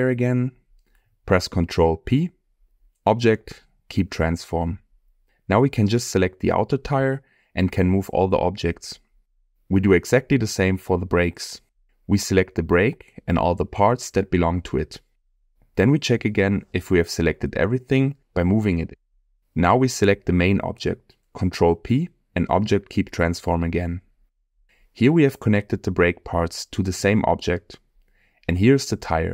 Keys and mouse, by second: 0.3 middle click, 2.0 ctrl+p, 4.9 click, 9.1-9.5 middle drag, 11.6 click, 13.4 shift+click, 14.5 shift+click, 15.6 middle click, 17.1 shift+click, 21.8 ctrl+p, 24.2-24.5 middle drag, 27.6 middle click.